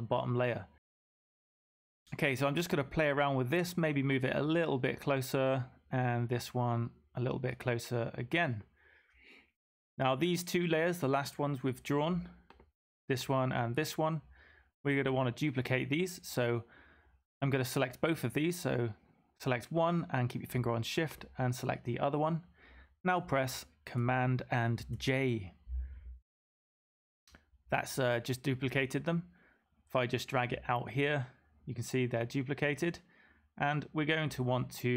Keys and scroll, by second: 24.7 super+j.